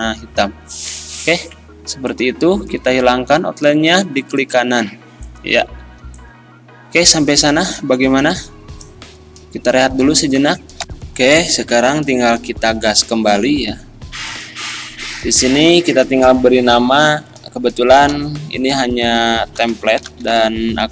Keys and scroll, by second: 5.8 z, 10.8 ctrl+End, 17.3 Caps_Lock, 18.0 t, 18.1 i, 19.8 p, 20.0 a, 20.1 l, 20.3 t.